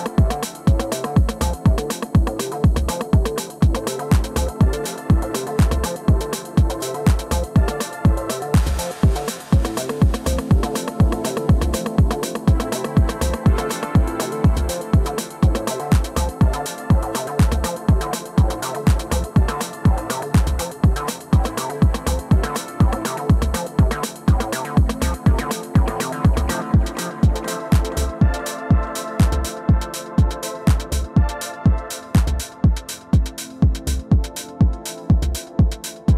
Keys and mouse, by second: 2.3 alt+click, 2.8 alt+middle click, 3.2 alt+click, 3.7 click, 4.0 alt+click, 9.5 shift+click, 11.1 ctrl+z, 11.8 click, 12.5 shift+click, 13.0 t, 14.5 shift+click, 17.2 click, 18.8 click, 20.1 click, 20.8 click, 22.5-23.0 alt+middle drag, 24.3 click, 26.1 2, 27.6 click, 28.1-30.0 drag, 30.9-32.9 drag, 34.3 4, 35.1 alt+click, 35.6 alt+middle click, 35.9 alt+click.